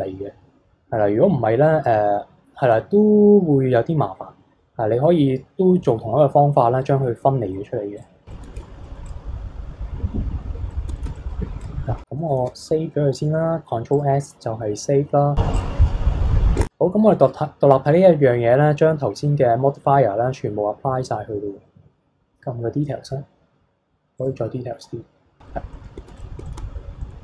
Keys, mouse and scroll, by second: 7.5 middle click, 8.0 click, 8.3 middle drag, 8.6 KP_3, 8.7 scroll down 1, 8.8 middle click, 9.0 click, 10.3-10.7 scroll up 2, 10.7-11.6 shift+middle drag, 11.6 click, 12.3 ctrl+s, 13.9 click, 15.5 click, 16.6 shift+h, 17.2-20.3 middle drag, 21.8-22.8 scroll up 6, 22.8-24.1 scroll down 7, 24.1 click, 24.5-25.4 scroll up 7, 25.4-25.7 scroll down 1, 25.7-26.2 middle drag, 26.2 click, 26.5-26.8 shift+middle drag, 26.8 scroll down 1, 27.0 middle click.